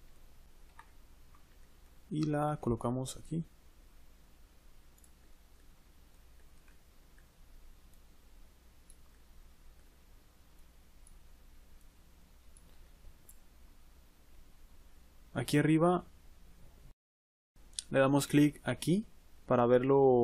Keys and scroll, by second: 2.4 g.